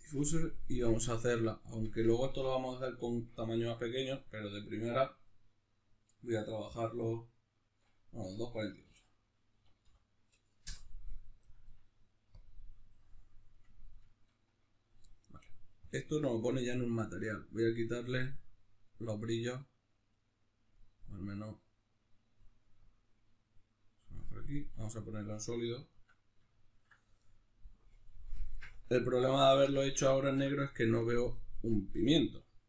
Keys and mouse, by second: 13.5-15.9 middle drag, 15.9 click, 18.3-25.9 drag, 24.5 z, 25.9-27.9 shift+middle drag, 27.9-29.5 drag, 29.5-32.6 shift+middle drag.